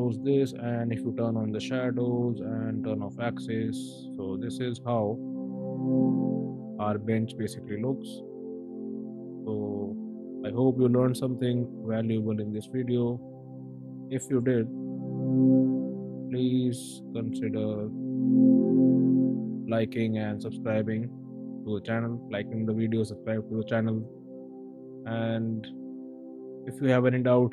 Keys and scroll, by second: 13.0 space, 14.2 b, 15.4 space, 16.0 Escape, 17.5 v, 18.0 b, 18.8 space.